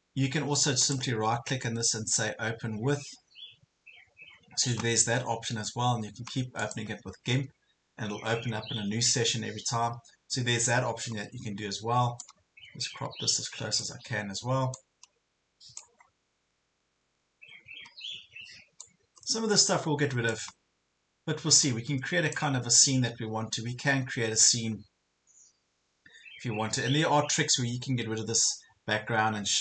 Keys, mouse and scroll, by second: 0.9 right click, 6.6 click, 10.7 ctrl+scroll down 1, 11.1 ctrl+scroll up 1, 12.2-14.0 drag, 14.2 ctrl+scroll up 1, 14.7 click, 16.1 ctrl+scroll down 1, 17.3 ctrl+scroll down 1, 17.9 ctrl+scroll up 1, 18.8-20.4 drag, 20.6 ctrl+scroll down 1, 21.6 click, 22.9 ctrl+scroll up 1.